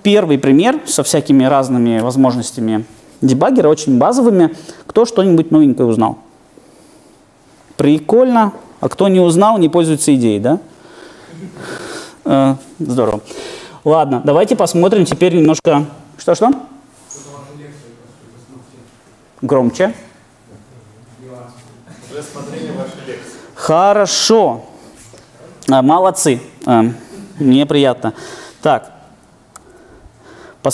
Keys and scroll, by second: 14.9 super+F2, 29.6 ctrl+2.